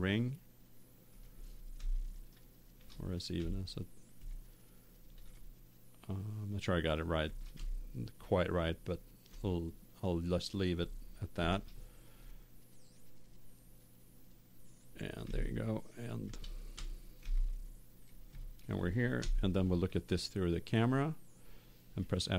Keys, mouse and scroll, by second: 2.1 middle click, 3.1 right click, 3.3 s, 4.2-5.4 drag, 5.4 middle click, 5.7 click, 5.7 middle click, 5.9 click, 6.0 middle click, 6.9 middle click, 8.0 middle click, 8.3-10.6 middle drag, 11.4 ctrl+r, 14.7 click, 15.4 middle click, 15.7 click, 16.6 middle click, 16.7 Tab, 17.5 middle click, 17.7 middle click, 18.0 middle click, 19.1 KP_0, 22.2 middle click.